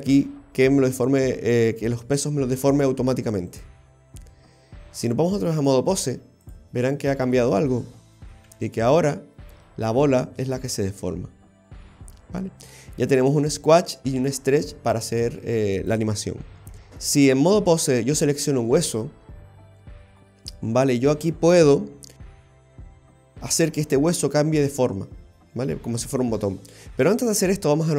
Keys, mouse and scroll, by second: 5.6 click, 7.3 right click, 8.5 g, 16.7 click, 16.7-17.5 scroll down 3.